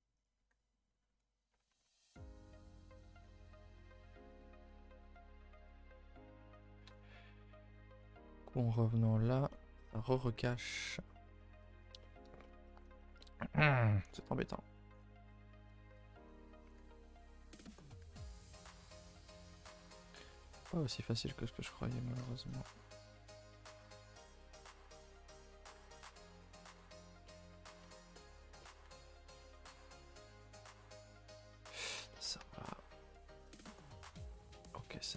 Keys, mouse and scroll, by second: 0.3 g, 2.4 click, 2.7 click, 3.2 g, 4.6 g, 5.6 click, 5.6 g, 6.8 KP_0, 7.7 shift+middle click, 8.0-8.4 scroll up 2, 8.4-8.8 scroll down 3, 9.2 scroll up 2, 9.5 shift+middle click, 9.9-10.2 scroll up 2, 10.2 shift+middle click, 10.7-11.6 scroll up 9, 11.6-13.4 middle drag, 13.4-14.1 scroll up 1, 14.1 g, 15.2 middle click, 15.9 g, 16.7 click, 16.7 g, 17.8 click, 18.0 g, 19.4 click, 19.4 g, 20.2 click, 20.3 g, 22.1 click, 22.3 shift+click, 23.2 click, 23.9 alt+click, 24.7 alt+click, 25.7 g, 27.2-28.8 middle drag, 28.8 Tab, 29.1 Tab, 29.4 click, 29.6 middle click, 30.3 g, 31.7 middle click, 32.2 scroll up 1, 32.4 Tab, 32.6-33.1 scroll down 2, 33.1 KP_0, 33.7 shift+middle drag, 34.0 a, 34.2-34.6 scroll down 4, 34.6-35.0 shift+middle drag, 35.0-35.1 scroll up 2.